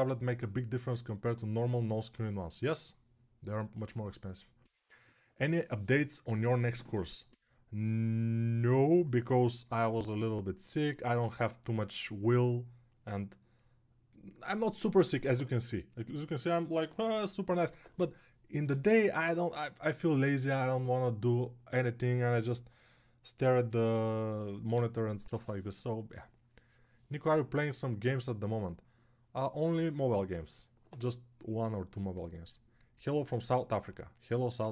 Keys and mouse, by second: 31.1-34.7 right drag.